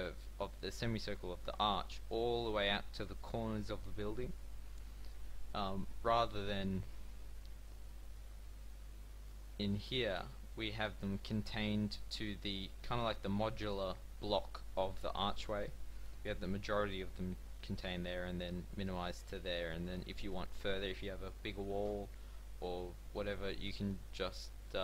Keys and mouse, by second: 7.5 middle click, 9.4 shift+middle click, 10.3 shift+middle click.